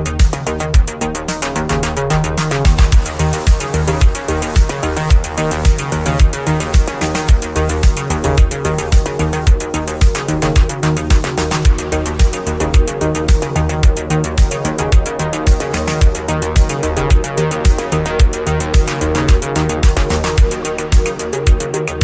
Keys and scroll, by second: 10.2 ctrl+z, 18.2 ctrl+z, 20.6 ctrl+z.